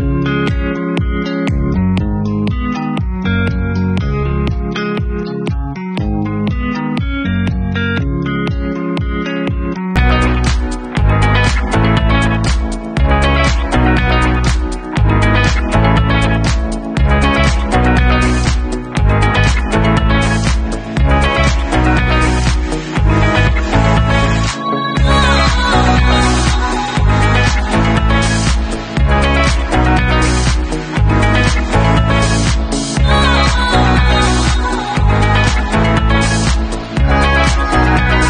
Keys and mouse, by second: 2.7 3, 3.0 alt+middle click, 3.1-6.9 alt+drag, 5.0 Tab, 5.8 ctrl+super+r, 5.9 ctrl+super+y, 6.9-7.3 middle drag, 7.3-16.8 drag, 16.8 alt+middle click, 16.9 alt+click, 17.5-18.9 middle drag, 18.9-25.0 drag, 22.0 alt+d, 25.0-34.1 middle drag, 25.6 alt+d, 30.4 alt+d, 34.1 click, 34.1-34.5 middle drag, 34.5-35.3 drag, 35.3-35.6 middle drag, 35.6 click, 36.4-36.8 middle drag, 36.8-38.2 drag.